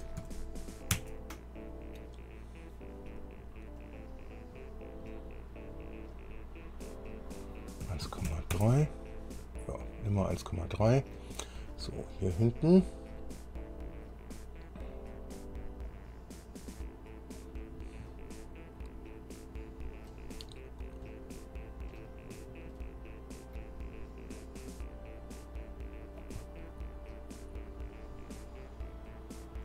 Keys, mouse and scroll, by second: 0.1 KP_2, 1.1 KP_Enter, 4.0 click, 6.3 click, 7.0 click, 8.0 KP_1, 8.5 KP_Decimal, 8.5 KP_3, 8.7 KP_Enter, 10.2 scroll down 1, 10.5 click, 11.5 middle click, 11.9 click, 13.1-13.6 scroll up 1, 16.0-17.7 drag, 17.8 scroll down 1, 18.3-20.4 drag, 21.3-22.3 drag, 22.9-23.9 drag, 24.6-26.6 drag, 26.6-29.6 drag.